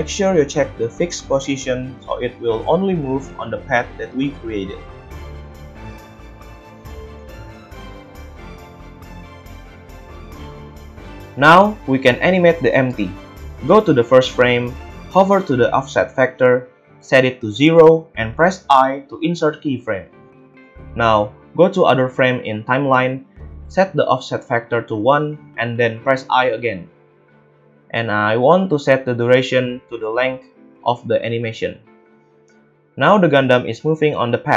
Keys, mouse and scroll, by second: 0.0-4.2 drag, 4.2-7.0 middle drag, 7.0-34.5 drag, 28.2 a.